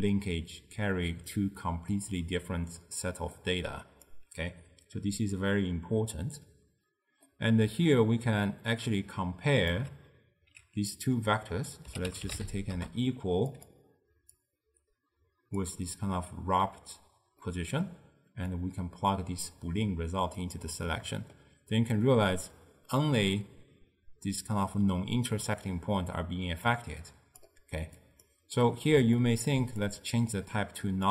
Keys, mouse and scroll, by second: 3.5 click, 7.3-8.8 middle drag, 8.8 drag, 14.5 click, 17.5-18.6 middle drag, 18.6 click, 21.0-22.1 middle drag, 22.1-25.1 drag, 28.2 click, 28.7-29.9 middle drag, 29.9-31.1 drag.